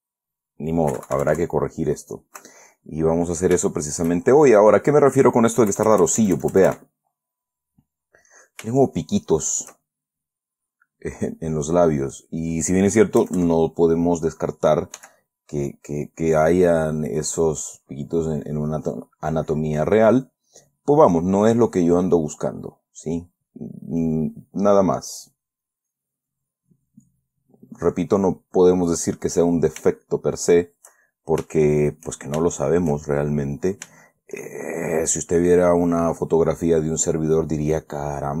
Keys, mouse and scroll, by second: 2.9 middle click, 3.9 shift+middle click, 4.4 shift+click, 4.5 shift+middle click, 5.2 middle click, 6.0 KP_Add, 7.9-9.0 middle drag, 9.1 shift+middle click, 10.2-12.3 shift+middle drag, 12.3 middle click, 13.5 KP_Add, 15.3 f, 17.0 click, 17.6-23.8 drag, 24.1-25.6 middle drag, 26.0-29.0 drag, 29.1 middle click, 30.4 shift+middle click, 31.3-32.4 shift+middle drag, 32.8-34.1 shift+middle drag, 34.3-35.4 shift+middle drag, 36.0-38.4 drag.